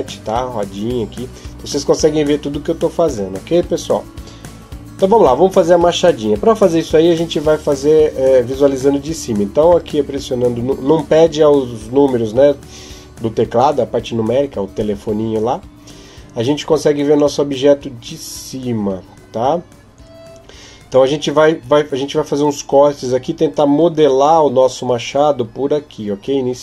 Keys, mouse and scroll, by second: 0.0-1.1 scroll down 5, 1.1-2.2 scroll down 1, 9.5 KP_7.